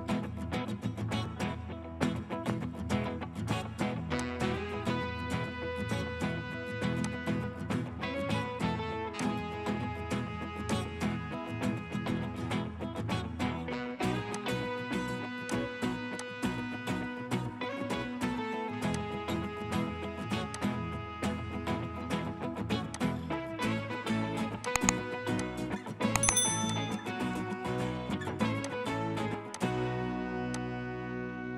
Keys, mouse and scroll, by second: 3.0 right click, 17.1-18.3 typing, 19.3-20.4 scroll up 1, 31.0 scroll up 1, 31.1-31.5 scroll down 1.